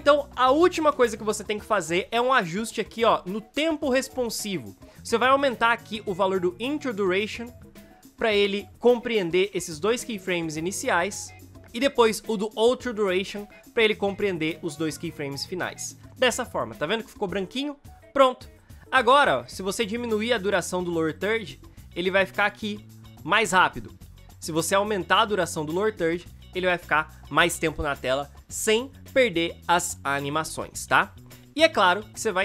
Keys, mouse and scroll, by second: 21.5 space, 26.0 space, 26.3 v, 31.0 space.